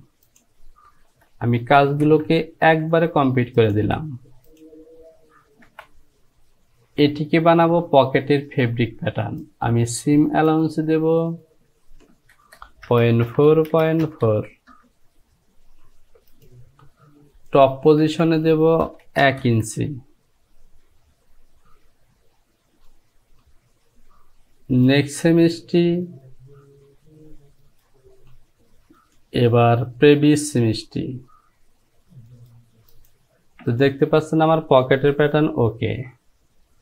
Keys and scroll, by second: 2.1 ctrl+z, 5.7 Home, 12.4 Down, 12.9 KP_Decimal, 13.3 KP_4, 13.5 Down, 13.7 KP_Decimal, 14.1 KP_4, 14.3 Down, 18.1 Down, 18.9 KP_1, 19.1 Down, 19.3 KP_1, 19.5 Down, 35.3 j.